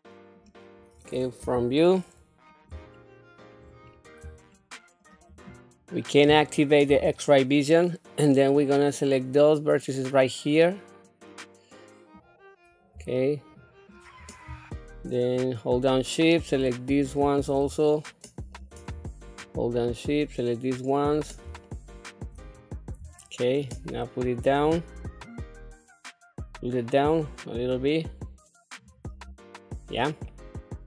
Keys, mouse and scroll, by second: 1.4 KP_1, 2.1 scroll up 1, 2.9 shift+middle click, 3.9-4.2 scroll up 2, 4.5 shift+middle click, 6.9 q, 8.5-12.2 drag, 13.2 shift+middle click, 15.3 shift+click, 15.5-17.0 shift+drag, 17.8 shift+middle click, 19.4-20.7 shift+drag, 21.6 shift+middle click, 22.6 scroll down 1, 23.1 shift+middle click, 24.6-28.8 drag, 29.7 scroll down 1, 30.3-30.8 middle drag.